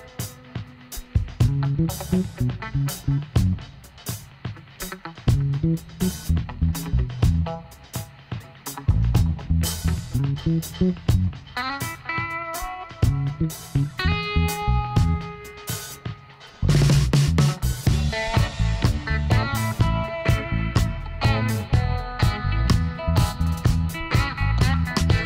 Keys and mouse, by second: 1.1 click, 1.5-6.2 middle drag, 6.2-8.1 drag, 7.5 s, 13.9-17.0 middle drag, 14.6 Tab, 18.9 ctrl+z, 19.4-21.2 middle drag, 19.8 Tab, 21.0 KP_1, 23.4-25.2 middle drag.